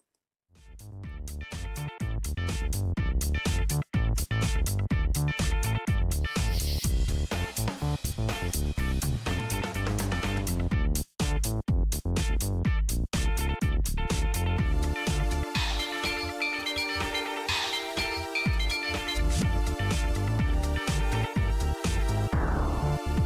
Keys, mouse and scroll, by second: 0.0 click, 0.9 right click, 2.4 click, 5.5 click, 6.1 click, 6.7 click, 10.6-11.0 scroll down 2, 11.0-11.8 scroll up 2, 11.8 click, 14.3 click, 15.3 click, 17.7 click, 19.5 click, 21.6 click.